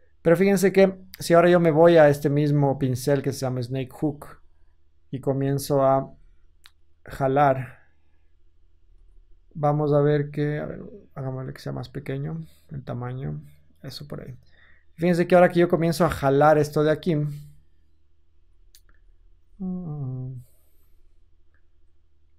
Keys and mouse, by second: 0.5-0.8 drag, 5.2 f, 5.8-6.8 middle drag, 5.9 g, 6.8-11.8 drag, 8.8 ctrl+z, 18.2 ctrl+z, 18.9 ctrl+z, 19.3 ctrl+z, 21.4-22.3 drag.